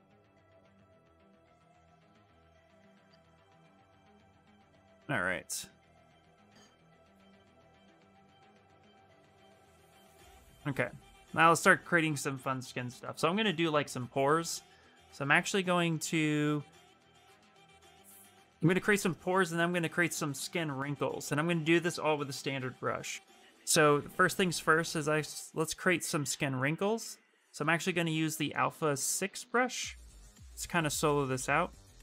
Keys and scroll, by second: 12.9-14.2 typing.